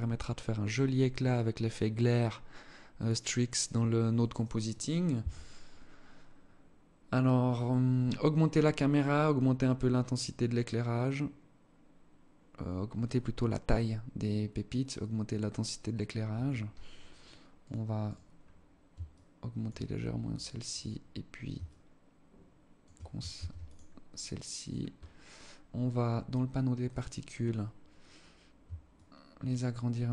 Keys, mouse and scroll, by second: 15.7 Escape, 17.1 right click, 17.5 right click, 18.6 shift+click, 19.4 scroll down 4, 20.2 right click, 21.1 shift+click, 22.8 ctrl+s, 24.1 right click, 24.5-24.9 scroll up 3, 25.7-26.8 scroll down 17, 26.3 click, 27.1-27.8 scroll up 2, 28.4 shift+click.